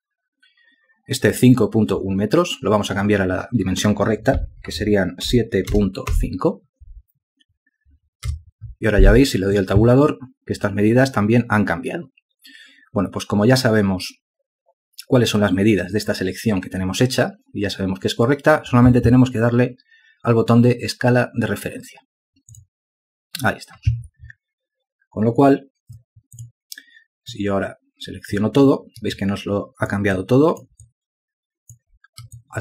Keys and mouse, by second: 9.1 Tab, 30.0 alt+click, 31.0 ctrl+alt+click, 31.7 alt+click.